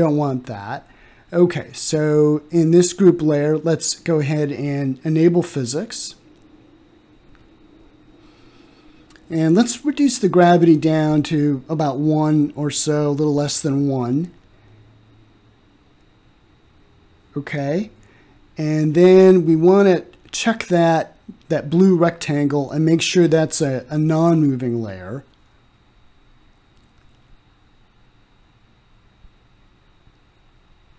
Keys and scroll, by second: 10.0 0, 10.3 ., 10.9 9.